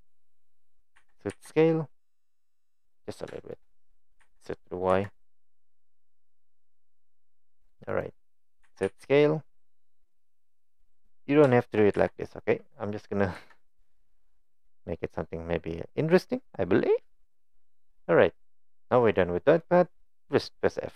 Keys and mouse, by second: 1.0 e, 3.4 shift+click, 4.2 e, 8.6 e, 11.5 shift+click, 12.0 e, 19.2 middle click.